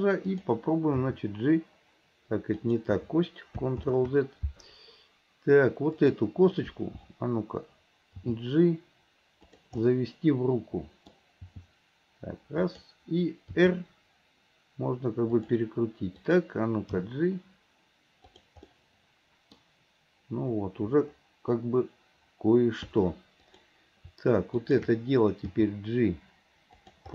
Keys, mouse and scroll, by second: 0.3 click, 1.1 g, 3.9 ctrl+z, 6.0 click, 8.3 g, 9.9-15.4 middle drag, 16.2 click, 18.8-20.0 middle drag, 23.5 click, 24.6 shift+click, 25.6 g.